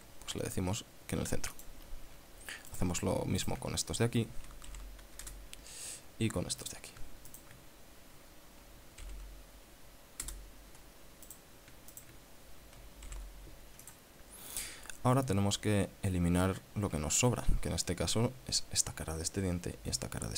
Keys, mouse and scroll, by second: 2.0 click, 3.2 right click, 3.9 shift+right click, 5.2 alt+m, 5.7 Return, 7.1 right click, 7.8 shift+right click, 9.5 alt+m, 10.7 Return, 11.8 right click, 12.4 shift+right click, 13.6 alt+m, 14.3 click, 15.8-16.2 ctrl+scroll down 2, 16.4-16.7 ctrl+scroll up 2, 17.4-17.7 scroll down 2, 17.9-18.4 scroll down 4.